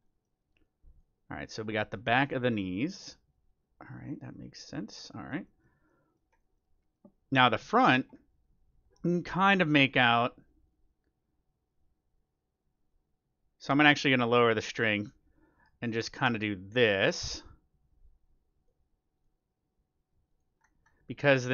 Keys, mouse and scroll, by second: 0.0-2.2 middle drag, 2.6 middle click, 3.2-6.1 drag, 5.4-9.7 middle drag, 9.9-11.6 drag, 12.9-14.7 drag, 15.3-17.1 drag, 19.1-20.8 drag, 20.5 middle click, 21.4-21.5 drag.